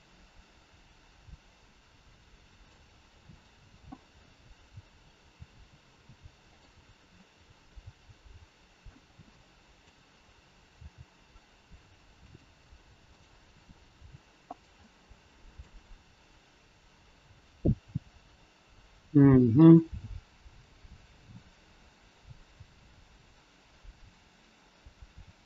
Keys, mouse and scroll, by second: 3.4 click, 3.9 middle click, 5.2 r, 7.0 scroll up 1, 7.5 middle click, 9.5 middle click, 10.7 g, 13.1 click, 13.9 g, 14.6 scroll up 1, 14.9 middle click, 19.5 middle click.